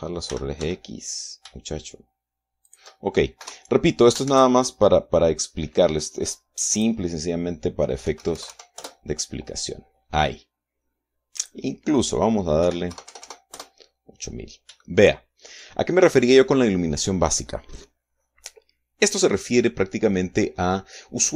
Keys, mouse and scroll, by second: 0.1 Escape, 0.9 r, 1.2 x, 3.3 shift+click, 4.0 KP_0, 4.9 shift+z, 7.3 click, 8.5 KP_5, 8.7 KP_0, 9.3 KP_Enter, 11.9 click, 13.2 KP_8, 13.5 KP_0, 14.1 KP_Enter, 15.4 shift+middle click, 21.1 scroll up 2.